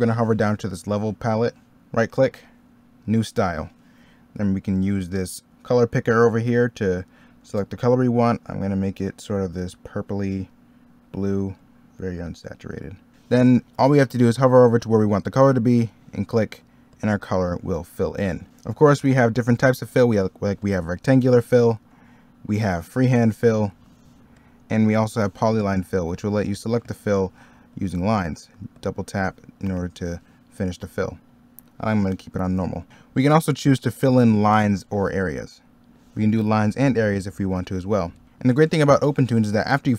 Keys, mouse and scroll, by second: 2.0 right click, 13.1 middle click, 21.4 ctrl+z, 23.9 ctrl+z, 30.8 middle click, 31.1 ctrl+z, 32.9 middle click, 38.0 ctrl+z.